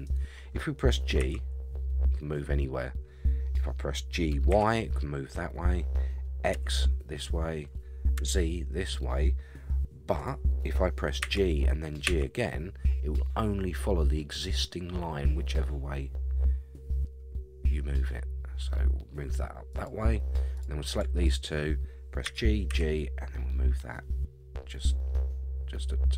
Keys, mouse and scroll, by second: 1.2 g, 11.2 g, 20.5 click, 21.1 shift+click, 22.2 g.